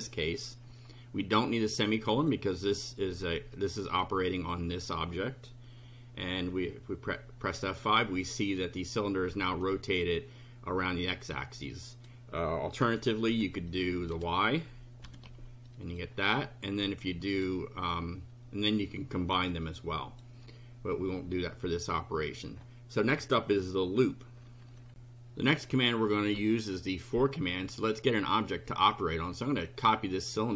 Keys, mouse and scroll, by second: 2.0 click, 3.6 click, 4.5 click, 6.4 F5, 11.6 click, 12.8 KP_0, 13.7 click, 14.2 1, 15.0 F5, 15.7 click, 16.8 click, 19.6 click, 24.9 ctrl+r, 25.7 click, 29.4 click.